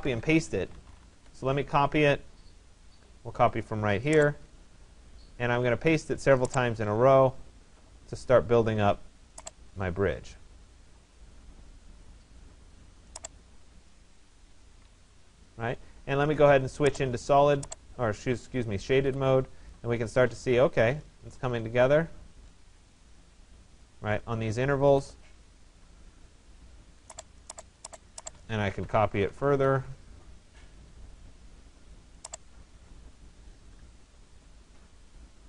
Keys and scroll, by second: 0.7 Return, 14.3 Escape, 29.1 Return.